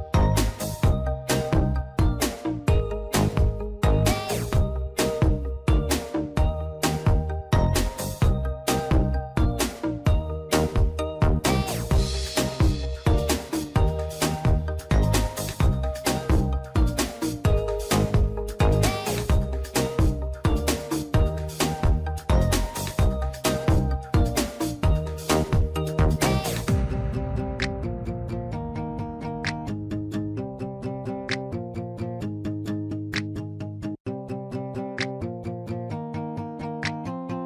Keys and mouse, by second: 0.9 click, 2.4 click, 2.7 click, 4.2 click, 4.8 click, 5.1 click, 7.4 shift+middle click, 8.1 shift+middle click, 9.0 a, 10.2 shift+d, 11.7-13.2 drag, 13.7 shift+middle click, 15.2 click, 16.5-18.9 drag, 19.4 click, 19.9 click, 20.3-22.4 drag, 22.7 click, 23.0 click, 24.7 click, 25.1-26.1 drag, 26.9 shift+middle click, 28.0 click, 28.8 click, 29.1-30.5 drag, 31.1-32.7 drag, 37.3 n.